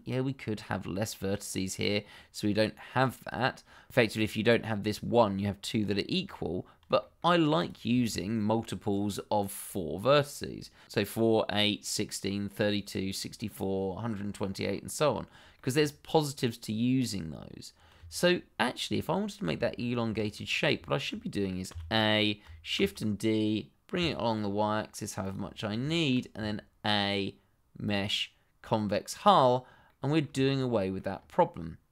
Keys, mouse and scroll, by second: 2.1 click, 4.4 shift+middle click, 4.5-4.9 scroll up 1, 4.9 click, 6.4-6.7 scroll down 1, 7.0 shift+middle click, 7.5 click, 15.0-15.4 scroll down 1, 15.5 shift+middle click, 17.7 scroll down 1, 18.1 shift+middle click, 18.6 scroll down 1, 18.9 shift+middle click, 19.6 middle click, 20.2 shift+middle click, 20.4-20.8 shift+scroll up 1, 20.8 shift+middle click, 21.7 a, 22.7 shift+d, 23.9 y, 25.2 click, 25.6 scroll down 1, 25.9 shift+middle click, 26.3 a, 27.8 click, 29.8 middle click, 30.3 shift+z, 30.7 middle click, 31.1 scroll up 1.